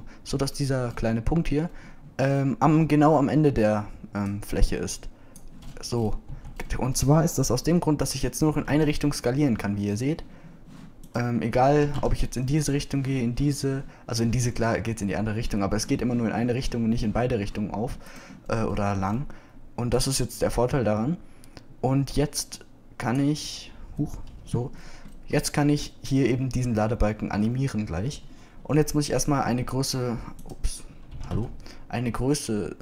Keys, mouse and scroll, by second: 7.3 Tab, 9.5 s, 12.8 s, 30.6 s, 32.1 s.